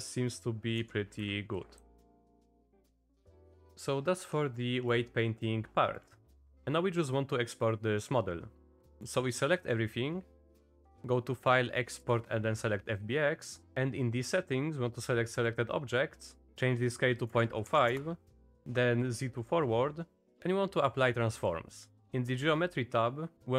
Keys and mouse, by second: 0.8 Down, 1.2 Up, 1.6 Up, 1.8 Up, 1.9 Up, 2.1 Up, 3.1 click, 3.8 click, 4.7 click, 8.5 click, 10.8-13.6 drag.